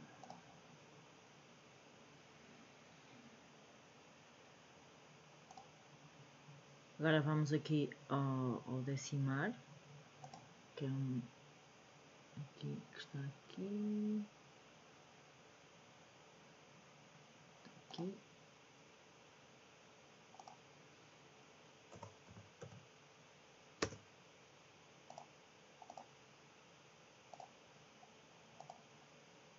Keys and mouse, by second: 5.5 click, 10.3-18.1 drag, 20.4-24.0 drag, 25.2-26.0 drag, 27.3 click, 28.6-29.5 drag.